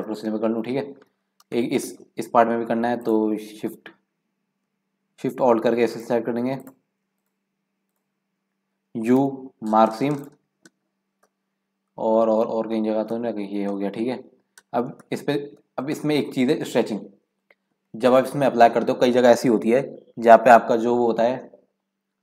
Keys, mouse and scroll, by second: 1.5 shift+middle click, 1.9-2.4 scroll up 3, 2.9 click, 3.8 scroll up 3, 5.9 alt+shift+click, 6.5 click, 7.2 alt+shift+click, 7.8 alt+shift+click, 9.2 u, 10.6-11.1 scroll down 10, 11.2-12.5 shift+middle drag, 12.5 scroll down 1, 12.6-13.3 scroll up 4, 13.3 shift+middle click, 13.7-15.6 scroll down 6, 15.6-16.0 scroll down 1, 16.0-19.0 shift+middle drag.